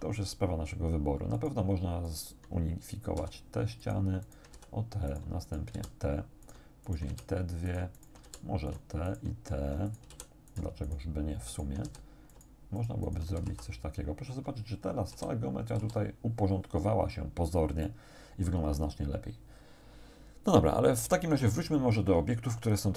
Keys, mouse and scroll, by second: 1.4 shift+right click, 2.1 shift+right click, 3.2 f, 3.9 shift+right click, 4.3 shift+right click, 4.6 shift+f, 5.1 shift+right click, 5.5 shift+right click, 5.8 shift+f, 6.5 shift+right click, 6.9 shift+right click, 7.1 shift+f, 7.7 shift+right click, 8.3 shift+f, 8.7 shift+right click, 9.1 shift+right click, 9.9 shift+right click, 10.1 shift+f, 10.5 shift+right click, 10.9 shift+right click, 11.5 shift+right click, 11.9 shift+f, 12.3 shift+right click, 12.8 shift+right click, 13.3 shift+f, 13.5 shift+a, 15.1 a, 15.9 a, 17.2 scroll down 2, 17.9 shift+click.